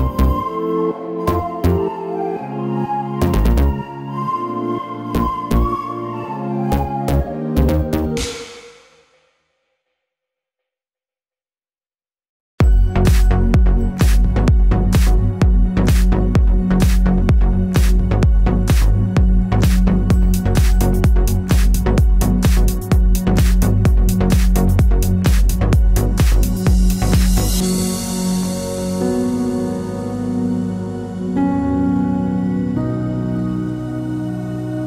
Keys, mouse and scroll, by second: 3.7 click, 4.6 alt+d, 8.4 r, 8.4 click, 8.6 g, 10.0 click, 10.2 s, 11.8 click, 12.0 alt+d, 13.2 click, 13.7 ctrl+z, 15.3 click, 15.4 r, 15.9 click, 16.7 alt+d, 18.1 click, 18.3 r, 18.7 click, 18.7 s, 19.2 click, 20.6 alt+d, 22.7-26.0 middle drag, 23.2 alt+d, 26.0 click, 26.1 alt+d, 27.5 click, 27.6 r, 29.1-30.8 middle drag, 30.8 click, 31.0-34.0 middle drag, 34.0 click, 34.4 h, 34.6-34.8 middle drag.